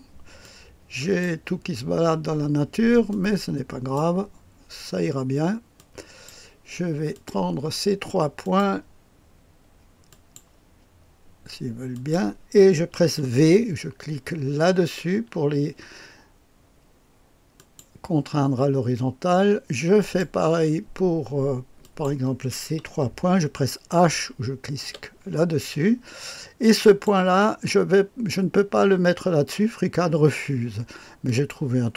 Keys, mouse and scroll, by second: 0.4-1.7 drag, 3.1-4.6 drag, 5.7-6.7 drag, 7.1 click, 7.7 click, 8.4 click, 10.0 click, 11.9 click, 14.8 v, 17.5 click, 19.9 click, 21.8 click, 24.8 h, 26.8 click, 31.2 click.